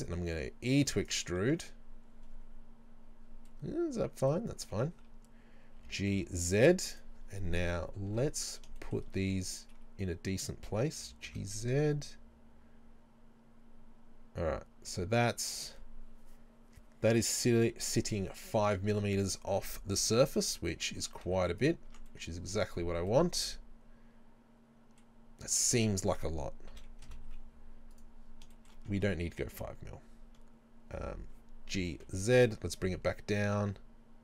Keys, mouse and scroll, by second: 1.1 shift+click, 1.6 Tab, 3.0 scroll up 1, 3.7-7.9 middle drag, 4.6 Tab, 5.0 a, 7.0 g, 7.0 click, 7.7 KP_3, 8.1 KP_1, 8.8-18.0 middle drag, 11.0 g, 18.0 click, 18.4-20.5 middle drag, 20.3 scroll down 1, 21.3 z, 21.9 Tab, 22.2 middle click, 22.8 scroll up 1, 23.1-34.2 middle drag, 26.8 KP_3, 27.1 KP_1, 27.3 z, 29.0 Tab, 31.8 g.